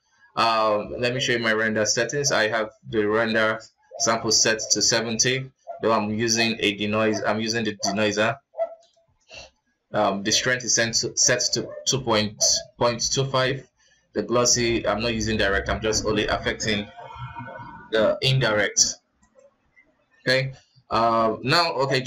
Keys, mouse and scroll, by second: 19.5 click, 19.7-20.3 scroll down 3, 20.3-21.2 scroll up 2.